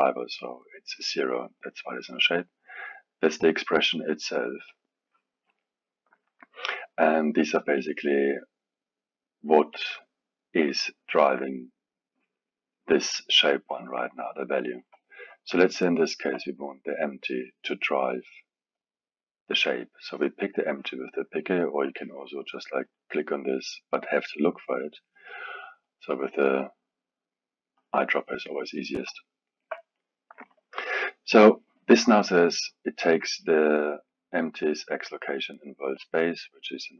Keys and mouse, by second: 9.1-12.1 drag, 15.6-18.6 alt+middle drag, 19.7 click, 22.8-25.3 drag, 25.8 click, 29.1-32.9 alt+middle drag.